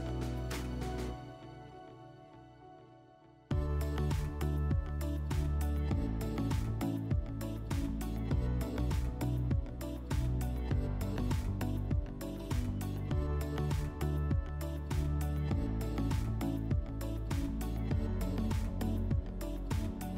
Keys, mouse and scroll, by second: 1.1-3.1 drag, 5.5 click, 6.5 click, 8.7 click, 10.2 click, 12.6 click, 15.6 click, 17.3 click, 17.6 click, 17.9 click.